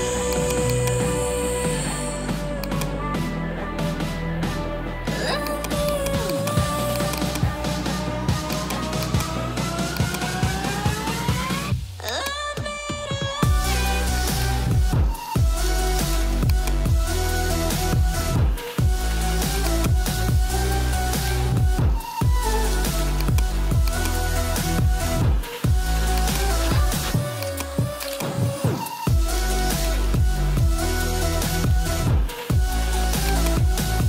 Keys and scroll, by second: 2.1 ], 7.6 [, 15.6 ], 22.3 ], 25.3 [.